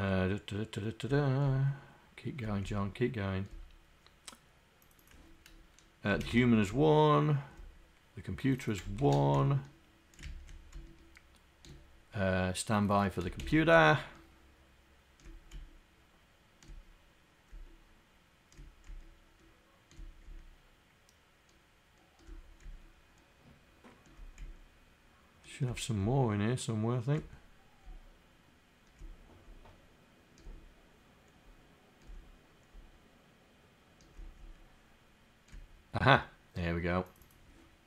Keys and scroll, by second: 13.3 /.